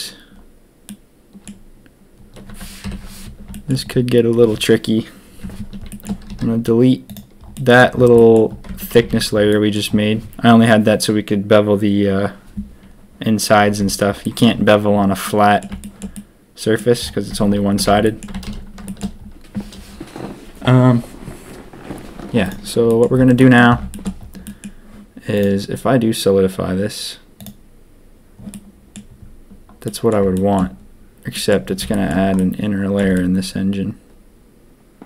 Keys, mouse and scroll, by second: 0.8 click, 2.8 ctrl+KP_3, 3.5 shift+click, 5.9 shift+middle click, 6.2 x, 7.5 middle click, 8.1 middle click, 8.6 Tab, 8.9 a, 9.0 a, 9.4 click, 9.6 middle click, 13.7 Tab, 14.2 middle click, 15.2 middle click, 15.8 shift+middle click, 16.1 middle click, 17.3 Tab, 17.6 a, 17.8 a, 18.0 drag, 18.5 ctrl+s, 18.8 shift+drag, 22.4 click, 22.8 drag, 23.3 drag, 23.9 shift+drag, 24.4 drag, 25.3-27.4 drag, 28.5-28.9 drag, 29.8 drag, 30.3 shift+drag, 31.3 middle drag, 31.9 shift+middle click, 32.3-32.9 middle drag, 33.1-35.0 shift+middle drag.